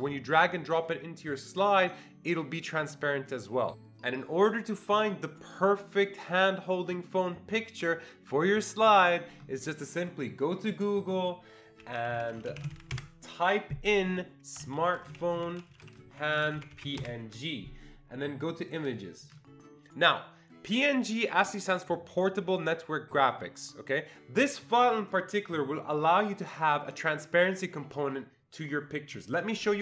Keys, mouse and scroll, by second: 3.7 click, 10.6 click, 11.0 click, 11.5-13.2 typing, 15.5-16.4 typing, 17.0 Return, 18.6 click.